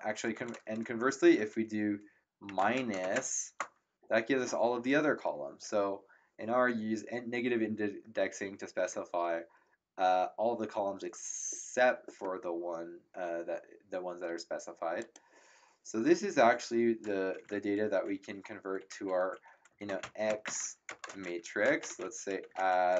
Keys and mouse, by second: 2.3-3.1 typing, 15.0 click, 19.5-22.9 typing.